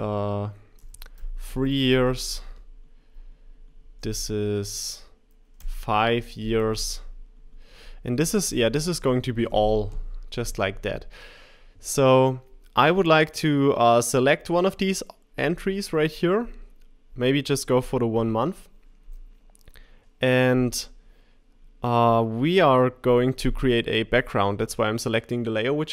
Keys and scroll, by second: 5.6 5.